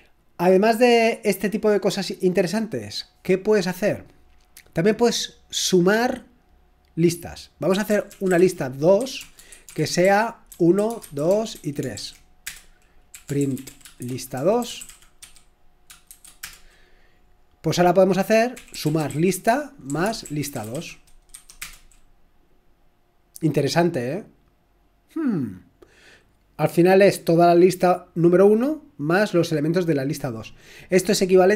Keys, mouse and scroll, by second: 7.8-16.4 typing, 18.5-21.6 typing.